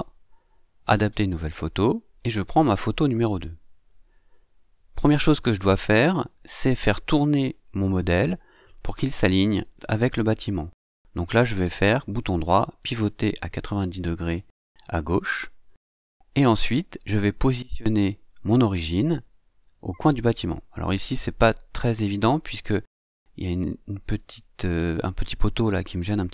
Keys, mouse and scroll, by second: 1.6 click, 3.2 click, 4.5 click, 8.7 right click, 13.7 click, 22.1-24.7 drag, 24.8-25.6 scroll up 1, 25.6 scroll down 1, 25.8-26.3 scroll up 3.